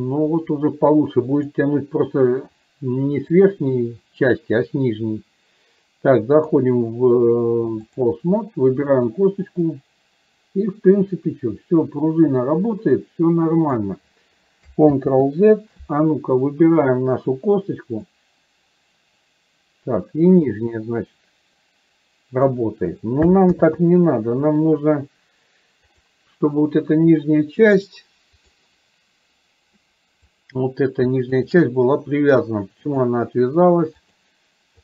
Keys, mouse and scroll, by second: 6.6-8.1 drag, 9.2-13.8 drag, 15.1 ctrl+z, 16.8 click, 18.2-22.6 drag, 23.7 ctrl+z, 25.9 click, 27.7-28.7 drag, 31.4 shift+click, 33.1-34.3 drag.